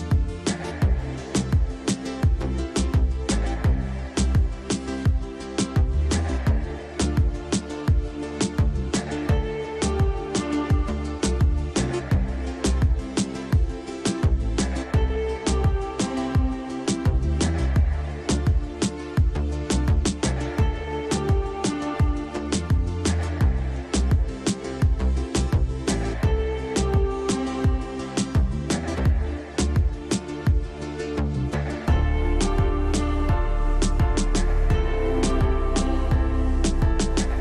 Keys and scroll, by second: 8.9 shift+Page_Up, 9.5 Escape, 12.9 space, 15.8 e, 16.1 Escape, 28.8 F2, 30.5 F3, 31.0 space, 31.9 Delete, 35.8 Escape, 36.7 F4, 37.1 Escape.